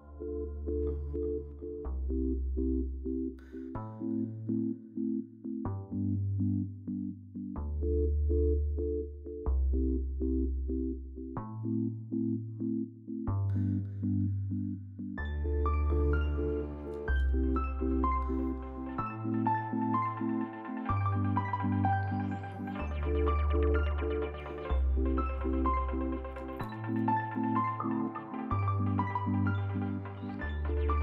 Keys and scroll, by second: 2.0 shift+s, 12.3 shift+s, 13.5 F4, 15.3 shift+s, 21.4 ctrl+z, 26.5 shift+s, 26.9 shift+s.